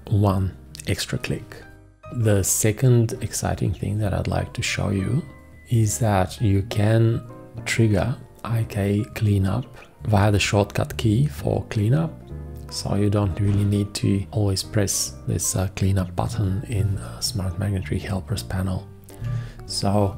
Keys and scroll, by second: 19.2 v.